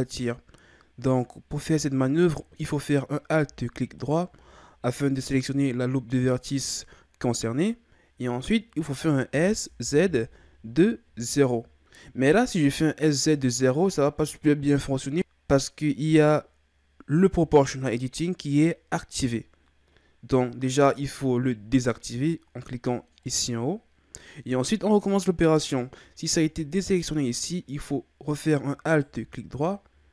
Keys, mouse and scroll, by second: 4.0 alt+right click, 23.2 click, 28.9 alt+right click.